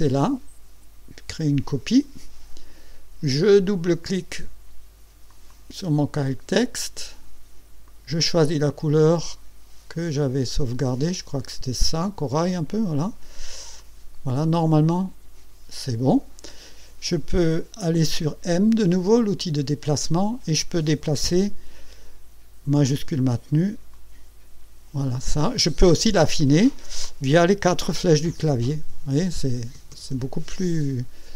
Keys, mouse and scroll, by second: 1.7 click, 5.3 click, 7.9 click, 10.2 click, 13.8 click, 19.4 click, 23.9-25.5 shift+drag, 26.3 ctrl+scroll up 2, 28.0 Up, 29.6 Down, 30.6 Up.